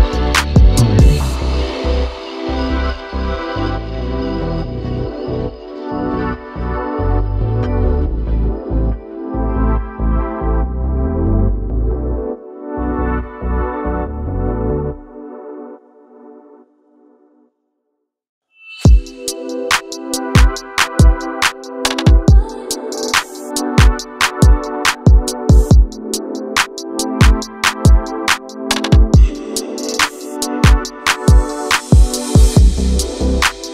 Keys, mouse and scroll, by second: 0.1 click, 0.4 ctrl+a, 0.9 click, 1.7 shift+a, 3.4 scroll down 1, 3.6 g, 4.5 Tab, 4.8 alt+z, 5.3 KP_1, 5.8 1, 6.1 click, 6.6 x, 8.1 Tab, 8.5 s, 9.4 g, 10.3 scroll up 1, 10.5 shift+middle click, 10.9 g, 11.6 r, 12.8 g, 14.0 r, 14.6 g, 15.4 r, 15.8 g, 16.8 scroll down 2, 17.0-17.8 middle drag, 17.8 alt+z, 18.1-19.1 right drag, 19.1-19.4 middle drag, 19.4-20.1 scroll down 1, 20.6-21.6 drag, 22.0-25.3 drag, 25.5-26.6 drag, 26.6 shift+a, 28.6-28.9 scroll down 1, 28.9 click, 29.3 ctrl+a, 31.6 click, 32.0 click, 32.5-33.7 drag.